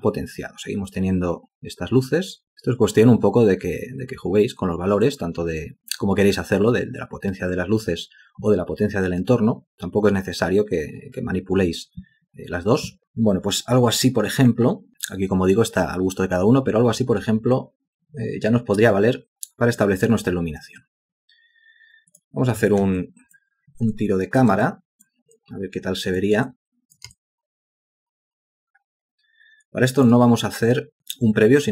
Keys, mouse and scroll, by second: 23.1 alt+click, 24.0 alt+shift+click, 24.7 alt+click, 25.4 alt+click, 26.5 ctrl+alt+click, 27.2 alt+shift+click, 30.5 alt+click, 31.2 alt+click.